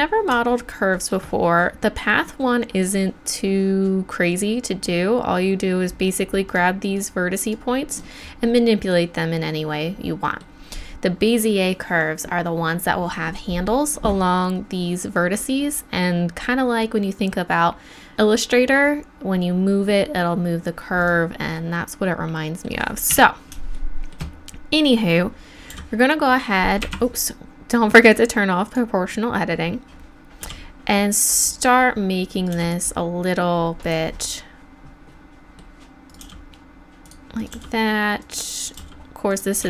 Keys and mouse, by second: 4.3 right click, 4.8-6.1 middle drag, 6.5 click, 6.7-9.8 right drag, 21.0-23.1 middle drag, 23.1 KP_1, 25.7 g, 28.0-30.4 drag, 30.4 g, 32.3-34.1 drag, 32.5 g, 36.1 right click, 36.2 g, 37.0 click, 37.4 right click, 37.5 g, 38.7 g.